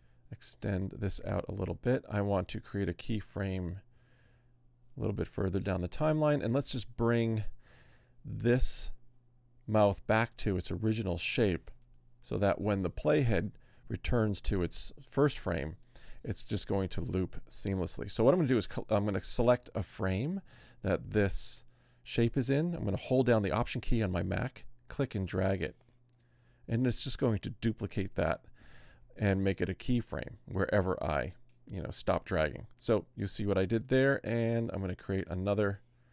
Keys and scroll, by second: 0.0 F5, 5.9 F6.